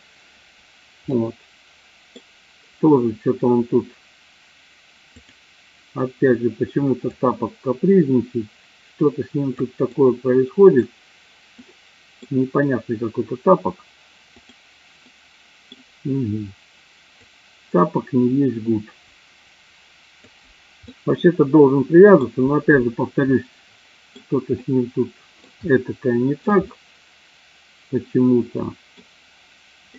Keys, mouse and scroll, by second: 1.0-2.1 middle drag, 7.0-9.5 drag, 9.9 middle click, 11.6 scroll up 1, 11.7 middle click, 15.0-15.6 middle drag, 17.1-20.1 drag, 20.9-22.4 middle drag, 23.5-24.2 middle drag, 24.7-25.6 middle drag, 25.6 scroll down 1, 25.9-26.7 shift+middle drag, 26.9-29.1 middle drag.